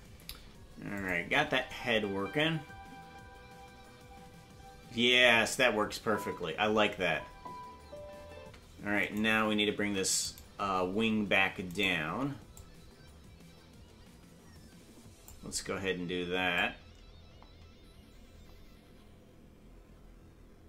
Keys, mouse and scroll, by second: 1.0 click, 1.3 space, 9.1 right click, 9.1 space, 9.8 ctrl+Tab, 10.5 right click, 11.8 shift+right click, 12.5-15.3 drag, 16.5-20.6 drag.